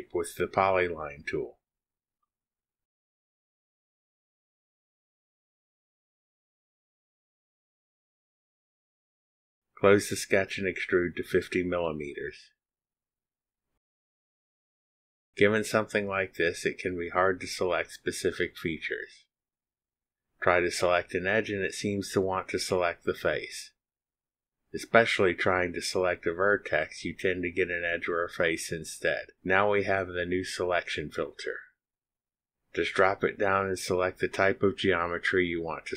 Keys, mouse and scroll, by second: 0.0 click, 1.0 click, 1.9 click, 3.3 click, 4.7 click, 5.9 click, 6.3 click, 6.8 click, 7.7 click, 8.5 click, 9.2 click, 11.1 click, 12.5 click, 13.8 KP_5, 14.0 KP_0, 15.0 KP_Enter, 30.2 click.